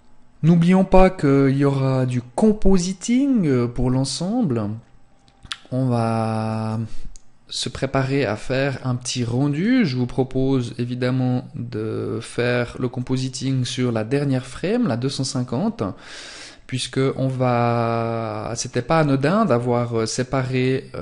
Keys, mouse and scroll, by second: 5.4 click, 8.5 click, 18.7 click.